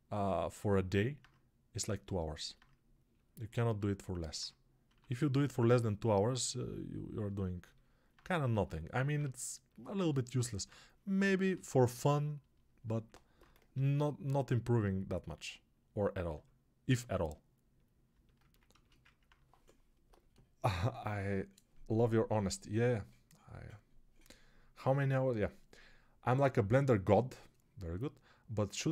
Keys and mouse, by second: 0.6-28.9 drag, 4.8 1, 13.6 g.